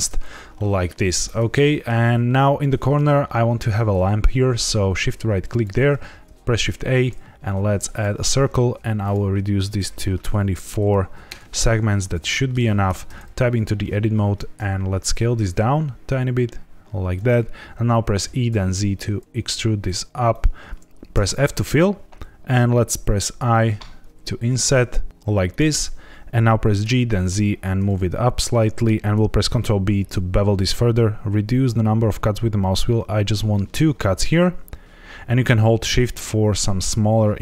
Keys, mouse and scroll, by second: 0.5 middle click, 1.1 scroll down 1, 1.4 shift+middle click, 5.4 shift+right click, 5.9 shift+a, 9.0 click, 9.6 click, 12.2 middle click, 12.8 Tab, 14.5 s, 17.1 click, 18.1 e, 18.4 z, 20.2 click, 21.1 f, 23.3 i, 25.4 click, 26.7 g, 27.0 z, 28.7 click, 29.4 ctrl+b, 30.8-32.0 scroll down 3, 32.0-33.8 scroll up 1.